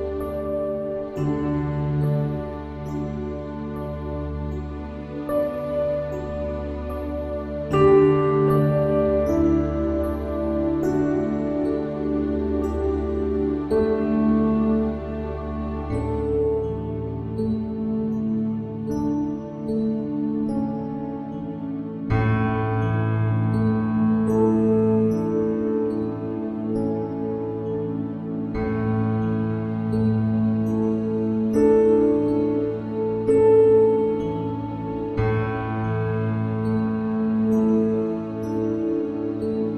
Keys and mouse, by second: 5.9 click, 37.2 click.